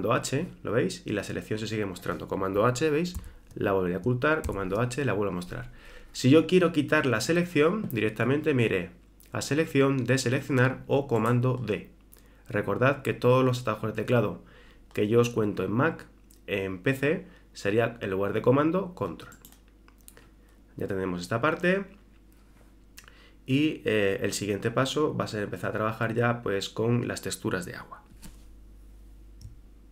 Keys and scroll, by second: 3.2 super+h, 4.5 super+h.